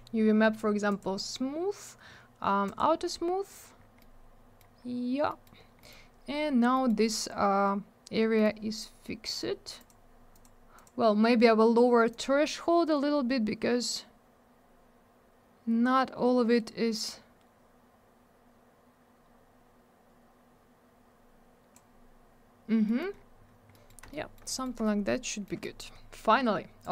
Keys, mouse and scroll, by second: 0.8 click, 0.9 click, 2.6 click, 2.7 click, 3.5-3.8 scroll down 1, 4.7-5.2 scroll up 1, 5.2 middle click, 5.4 middle click, 5.5 scroll down 1, 5.8 middle click, 5.8 double middle click, 6.0 scroll up 1, 6.5 scroll down 1, 6.7 middle click, 6.8 middle click, 6.9 scroll up 1, 8.4 middle click, 9.2 click, 9.3 click, 9.7 click, 9.8 double click, 10.3 click, 10.4 click, 10.7 click, 10.8 double click, 12.0 click, 22.8 middle click, 22.9 middle click, 23.1-23.7 scroll down 1, 23.8 middle click, 24.1 alt+middle click, 24.4 middle click, 24.6 middle click, 25.6 middle click, 25.7 middle click, 25.9 scroll up 1, 26.8 click, 26.8 click.